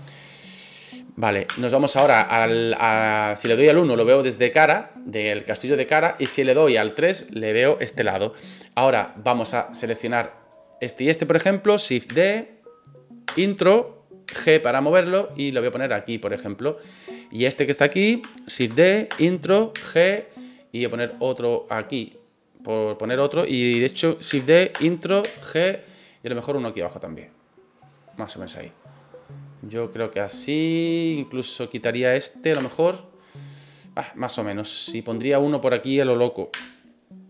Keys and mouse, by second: 1.4 KP_1, 1.9 KP_3, 3.4 KP_1, 6.2 KP_3, 9.8 right click, 10.5 shift+right click, 12.1 shift+d, 13.3 Return, 14.3 g, 16.4 click, 17.0 right click, 18.6 shift+d, 19.1 Return, 19.7 g, 22.1 click, 24.3 shift+d, 24.7 Return, 25.2 g, 27.7 click, 28.1-28.6 middle drag, 29.1 right click, 29.4-29.9 middle drag, 30.8 right click, 32.5 Delete, 36.5 KP_3.